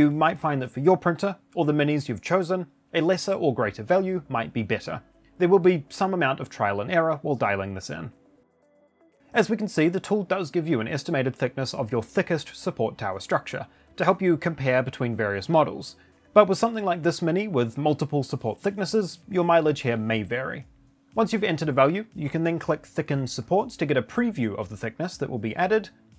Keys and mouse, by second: 0.4-0.7 shift+middle drag, 0.9 middle click, 1.4-1.9 shift+middle drag, 2.6 click, 4.2 click, 7.9 middle drag, 8.4-9.4 shift+middle drag, 9.8 middle click, 22.1 click, 25.8 middle drag.